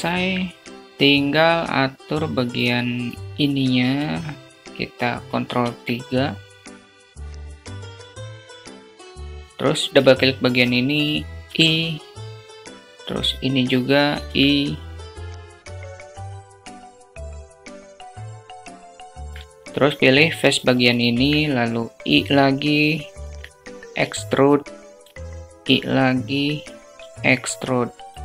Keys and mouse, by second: 1.6 click, 3.3 click, 5.1 ctrl+3, 6.4 click, 7.1 ctrl+3, 7.1 click, 7.5 ctrl+click, 7.6 ctrl+3, 7.8 alt+shift+middle click, 8.4 ctrl+3, 8.9 ctrl+3, 9.1 alt+shift+click, 9.3 Tab, 9.8 click, 11.4 i, 13.7 i, 15.1 Tab, 15.4 Tab, 15.9 click, 16.2 i, 16.8 i, 17.1 Tab, 17.6 alt+shift+click, 18.4 i, 19.9 alt+shift+click, 21.7 i, 23.4 e, 24.6 i, 26.8 e.